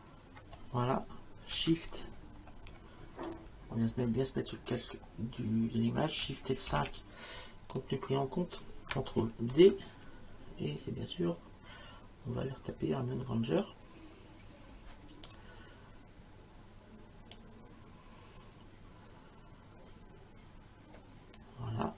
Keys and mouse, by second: 3.3 shift+click, 4.7 click, 6.7 shift+F5, 7.8 click, 9.6 ctrl+d, 15.3 click, 17.4 click.